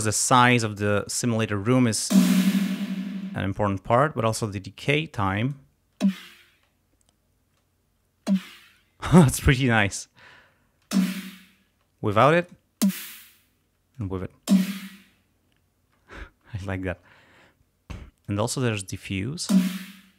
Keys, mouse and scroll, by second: 2.1 space, 3.1 space, 6.1 space, 8.3 space, 9.5 space, 10.4 scroll up 2, 10.9 space, 12.5 click, 12.9 space, 13.7 space, 14.0 click, 15.5 space, 18.3 click, 19.5 space.